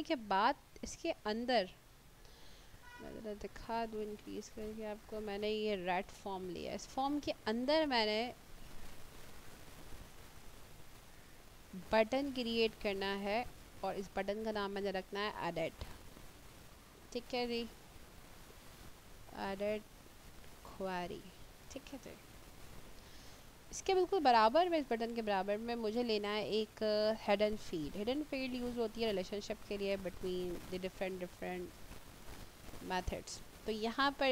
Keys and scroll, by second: 18.3-21.1 typing.